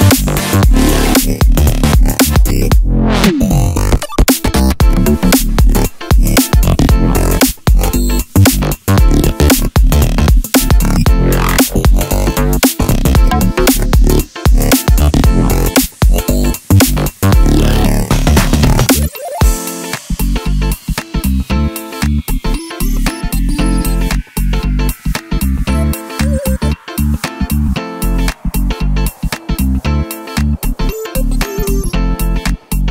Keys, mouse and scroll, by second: 0.6 click, 1.0 alt+e, 2.9 click, 3.2 ctrl+KP_Add, 3.6 g, 4.5 click, 4.5-5.1 middle drag, 4.6 Tab, 4.8-5.1 scroll up 2, 5.1 click, 5.2-7.4 middle drag, 5.4-5.9 scroll down 4, 5.9-6.3 scroll up 2, 6.3 ctrl+z, 7.4 click, 7.8 ctrl+z, 8.8-9.4 drag, 9.1 Tab, 9.4-13.5 middle drag, 10.8 click, 11.8 ctrl+z, 13.5 click, 14.2-16.0 middle drag, 15.1 e, 16.1 Tab, 16.3 scroll down 1, 16.5 click, 16.7-20.3 middle drag, 17.6-17.9 scroll down 2, 19.4 ctrl+s, 20.3 right click, 20.6-21.7 middle drag, 21.7 click, 21.9-23.0 middle drag, 22.4 Tab, 23.0 click, 23.2 2, 23.3 click, 23.6 shift+click, 23.9 shift+click, 24.4 shift+click, 24.7-27.9 middle drag, 25.6 z, 26.8 shift+d, 27.1 Return, 27.9 click, 28.1 click, 28.3 click, 28.5 click, 28.7 click, 28.8 Tab, 29.9 ctrl+r, 31.5 Escape, 31.6-32.9 middle drag, 32.0 ctrl+r.